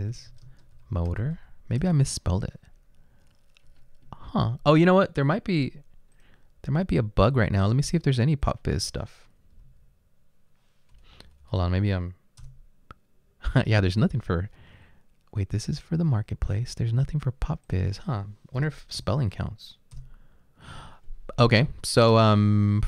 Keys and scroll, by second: 0.0-1.9 typing, 6.9 typing, 11.1 Delete, 11.2 Delete, 11.4 Delete, 11.7 Delete, 12.4 Delete, 12.5 Return, 19.0 p, 20.0 Return.